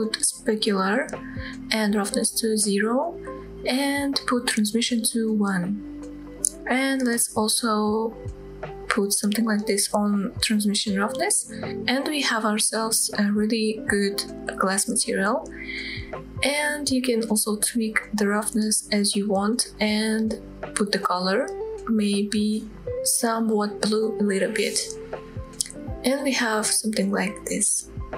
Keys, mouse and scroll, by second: 1.0 click, 2.4-3.5 drag, 6.1 click, 7.4-10.2 drag, 11.3-11.7 scroll down 2, 11.7-12.4 middle drag, 12.6 scroll up 2, 13.0-13.4 shift+middle drag, 13.6-14.1 middle drag, 15.9-17.8 drag, 20.9-21.8 scroll up 2, 21.8-22.7 drag.